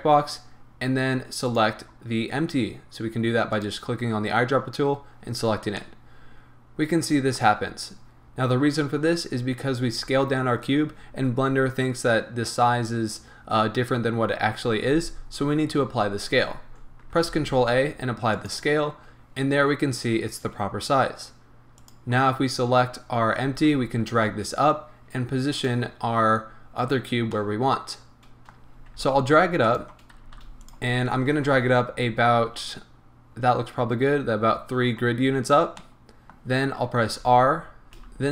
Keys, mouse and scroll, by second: 1.4 click, 5.6 scroll down 2, 5.8-21.8 middle drag, 7.6-8.0 scroll up 2, 17.2 ctrl+a, 19.1-19.9 scroll up 2, 19.9-21.8 scroll up 1, 21.8 click, 23.5 g, 25.6 click, 26.5-27.4 scroll down 1, 27.4-29.7 middle drag, 28.6 scroll down 2, 28.7 scroll up 2, 28.9 g, 29.7 click, 30.2 g, 30.7 click, 31.3 KP_1, 32.2-35.1 scroll up 1, 35.5 scroll down 1, 35.8-38.3 middle drag, 37.9 r.